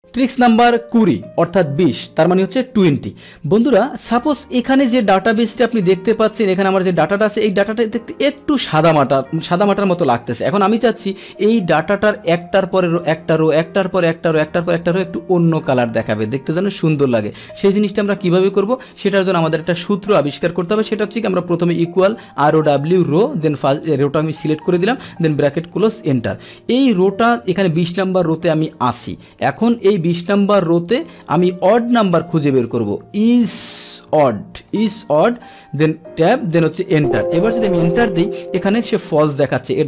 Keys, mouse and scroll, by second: 4.2 click, 4.9-8.4 drag, 8.8-9.3 scroll down 1, 9.3-10.6 scroll up 1, 10.6-12.3 scroll up 1, 12.3 click, 12.9 click, 13.4 click, 14.3 click, 14.6 click, 17.6-18.5 drag, 19.4 click, 20.0 Delete, 20.6 Delete, 24.1 Tab, 25.8 Return, 26.6 Up, 30.5 click, 31.3 click, 32.4 click, 34.9 BackSpace, 35.9 Tab, 36.9 ctrl+Return, 37.6 ctrl+Return.